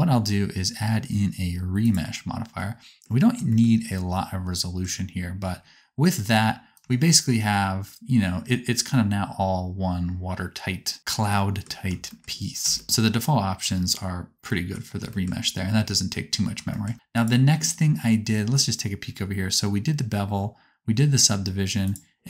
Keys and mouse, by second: 2.5 middle click, 2.7 middle click, 2.9 middle click, 14.0 click, 14.0 middle click, 14.0 right click, 17.2-22.2 drag.